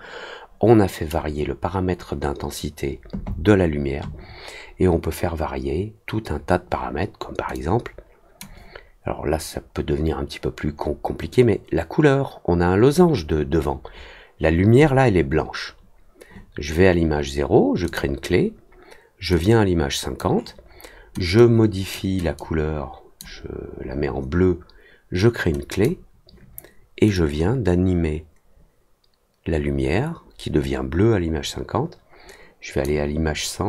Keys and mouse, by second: 7.5 click, 17.8 click, 19.4 click, 21.3 click, 22.3 click, 25.7 click, 27.1-32.8 drag.